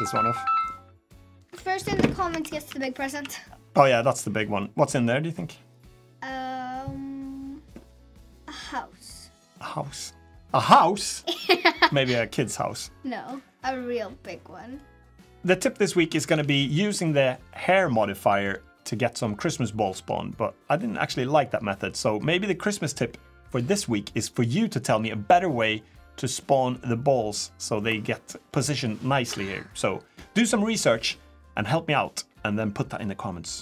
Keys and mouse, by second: 2.1 Tab, 2.5 Tab, 2.9 a, 3.5 middle drag, 4.4 middle drag, 8.8-9.9 middle drag, 9.5 click, 9.9 click, 11.0 middle click, 11.6 middle click, 14.1-14.5 middle drag, 14.9-15.3 middle drag, 26.1 middle drag, 27.2 middle drag.